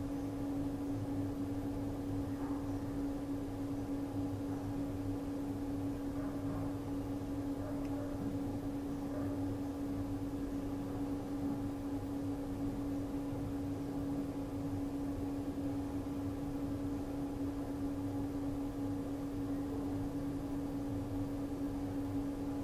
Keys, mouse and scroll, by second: 0.1 ctrl+d, 0.2 typing, 1.8 v, 2.5 click, 4.3 r, 4.9 alt+Num_Lock, 5.1 click, 5.4-7.1 typing, 7.1 click, 8.2 r, 8.8 alt+click, 9.4 ctrl+d, 9.5-11.2 typing, 11.7 click, 13.4-16.0 typing, 13.8 alt+click, 15.1 ctrl+z, 15.8 click, 17.2 r, 17.8 click, 18.3-19.8 typing, 20.2 click, 21.7 r.